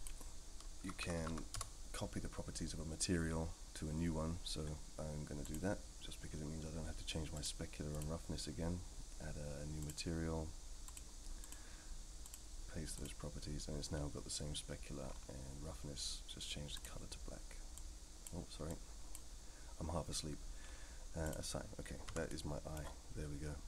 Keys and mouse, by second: 5.4-6.2 drag, 7.5-8.0 drag, 12.3-13.1 drag, 21.2 click, 22.1 Tab, 22.3-22.7 middle drag.